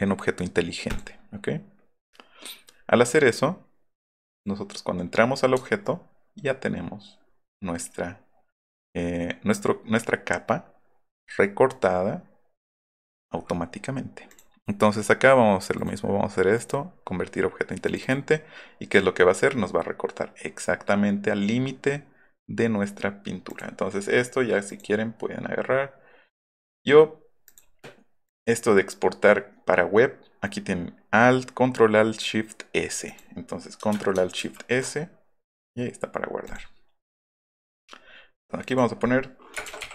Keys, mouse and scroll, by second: 0.8 click, 4.1 click, 5.5 alt+scroll up 1, 12.8 click, 14.3 click, 15.8 click, 17.8 click, 18.0 click, 18.7 click, 18.9 click, 23.5 click, 24.7 click, 27.4 click, 33.1 click, 36.4 click, 38.6 click, 39.6 shift+t.